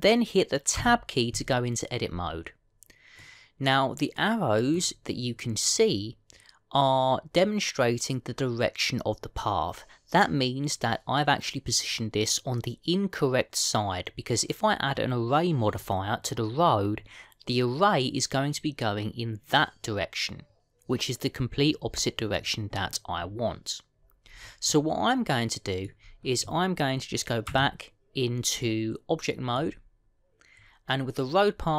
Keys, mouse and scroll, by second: 1.6 Tab, 4.1 middle click, 18.0-21.2 scroll down 3, 24.8-27.0 scroll down 6, 25.6 middle click, 27.0-28.3 scroll down 1, 28.4 Tab, 29.5 middle click, 30.4-31.3 scroll down 2.